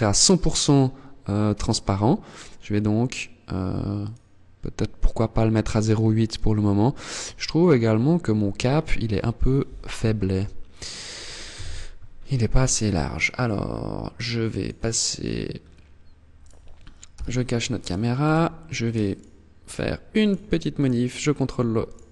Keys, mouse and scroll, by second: 1.0 click, 2.6 click, 5.8 scroll up 2, 9.0 z, 11.0 KP_1, 11.4-11.8 scroll up 4, 12.0 shift+middle click, 13.8 click, 14.8 scroll up 4, 15.7 right click, 16.4 h, 16.8 scroll up 1, 17.2 right click, 17.5 Tab, 18.6 alt+right click, 19.6 right click, 20.0 alt+right click, 21.2 alt+shift+right click, 21.8 alt+shift+right click.